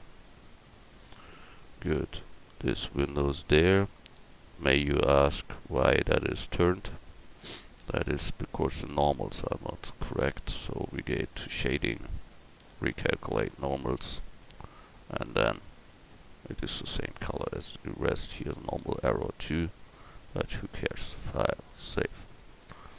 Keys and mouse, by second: 1.1 Tab, 2.5 Tab, 3.3 Tab, 4.4 Tab, 7.8 l, 8.5 l, 11.1-15.0 drag, 14.5 Tab, 15.0-17.6 middle drag, 18.0-19.3 middle drag, 20.9-22.0 middle drag.